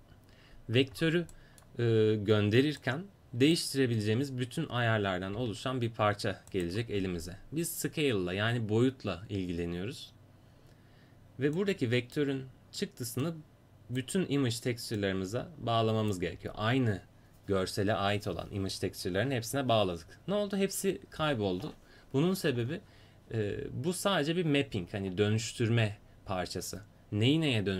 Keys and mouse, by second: 2.8 click, 3.0 right click, 5.4 g, 11.6-27.7 drag.